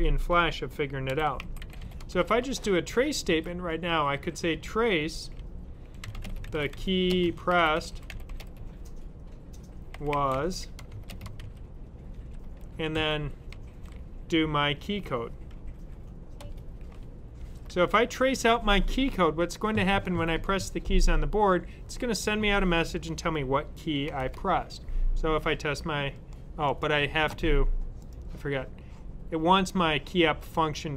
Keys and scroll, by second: 1.0-2.0 typing, 3.1 typing, 5.6-13.4 typing, 15.4 typing, 17.0-17.7 typing.